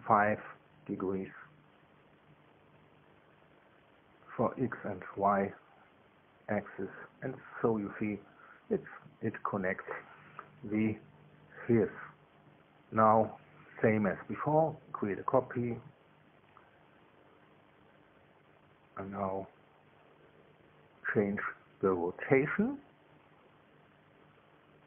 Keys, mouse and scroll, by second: 0.0 KP_Enter, 2.2 click, 5.7 KP_5, 5.9 KP_5, 6.6 KP_Enter, 9.5-11.6 drag, 16.0 ctrl+c, 17.9 click, 19.0 ctrl+v, 20.4 click, 23.4-24.8 drag.